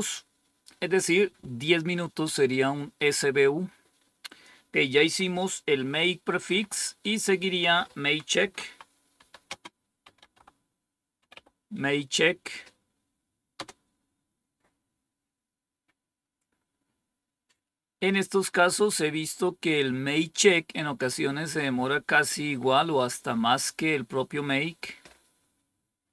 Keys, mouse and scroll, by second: 4.2 click, 6.4 Down, 8.1-11.8 typing, 13.5 Return, 16.3-16.9 scroll down 1, 16.9-18.3 scroll down 1, 18.3-19.0 scroll up 1.